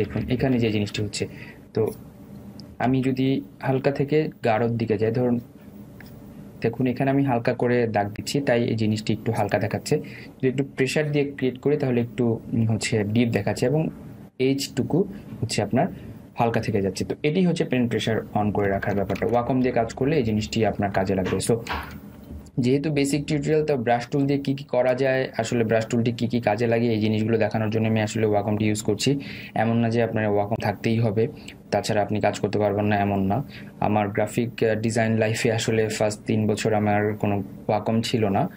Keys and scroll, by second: 3.2 ctrl+z, 19.3 ctrl+alt+z.